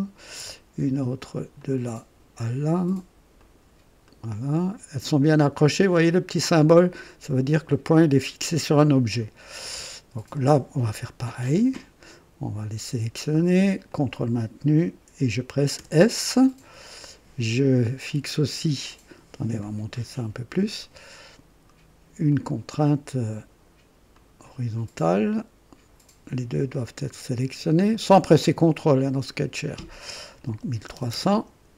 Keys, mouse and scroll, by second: 1.6 click, 3.3 click, 4.0 right click, 10.3 click, 12.0 click, 13.9 click, 15.7 s, 19.6-20.8 drag, 22.3 click, 24.1 click, 26.7 click, 28.8 click, 30.3-31.7 typing.